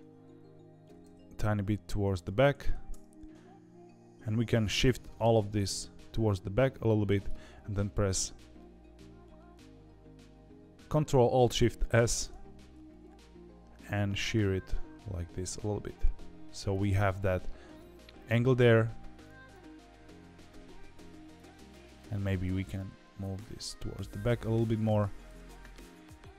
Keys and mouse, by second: 0.8 g, 2.5 ctrl+z, 4.1 ctrl+z, 4.1 click, 4.9 g, 11.9 ctrl+alt+shift+s, 19.3-21.6 drag, 22.5 g.